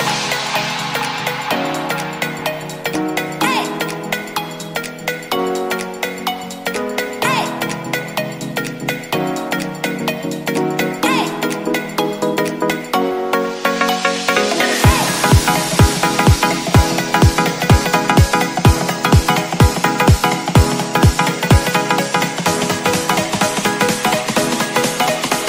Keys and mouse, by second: 0.0 click, 0.5 ctrl+s, 0.7 a, 0.9 a, 1.5 /, 2.4 drag, 3.4 shift+drag, 4.2-4.6 middle drag, 4.9-5.3 shift+middle drag, 6.0-6.3 middle drag, 7.1-7.6 drag, 7.8 Tab, 8.3 shift+middle click, 9.2-10.5 shift+drag, 11.5 alt+s, 16.2 Tab, 17.0 ctrl+s, 17.3 a, 17.5 a, 17.8-18.1 drag, 18.4 click, 18.8 Tab, 19.2 Tab, 20.3 shift+d, 22.0 Tab, 23.0 middle click, 24.4 click.